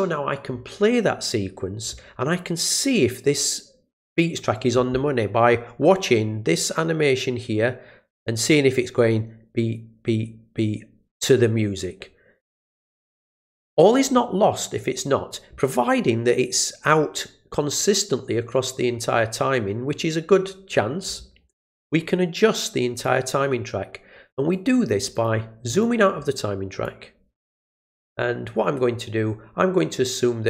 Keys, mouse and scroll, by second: 22.9 click, 24.5 click, 24.9 click, 25.1 click, 25.7 click, 26.8 click.